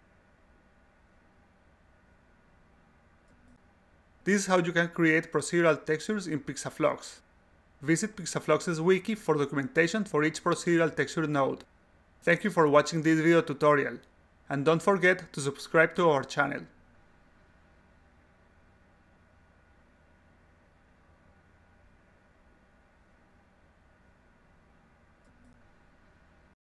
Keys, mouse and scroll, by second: 0.2 click, 0.7 click, 1.5 click, 2.2-6.4 drag.